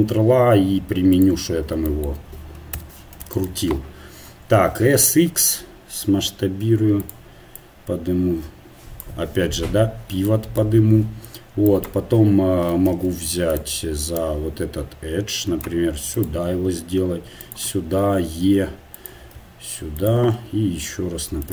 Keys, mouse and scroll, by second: 1.2 ctrl+a, 2.8 Tab, 5.5 s, 7.6-10.3 drag, 14.2 right click, 17.2 s, 17.9 e, 19.3 s, 20.3 e.